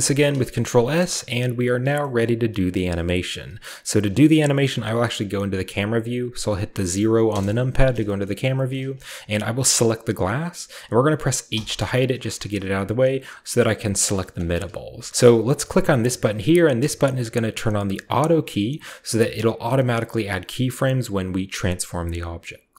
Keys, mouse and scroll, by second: 0.0 ctrl+s, 0.7-1.7 ctrl+shift+scroll down 1, 1.7 shift+scroll down 1, 2.2-4.2 shift+middle drag, 7.3 KP_0, 8.1-8.6 shift+middle drag, 8.3-9.8 scroll up 1, 8.7-9.9 middle drag, 9.8 right click, 11.5 h, 12.3-15.1 shift+middle drag, 13.5 g, 14.7 a, 15.1-16.5 scroll down 1, 18.1 click, 19.4 click.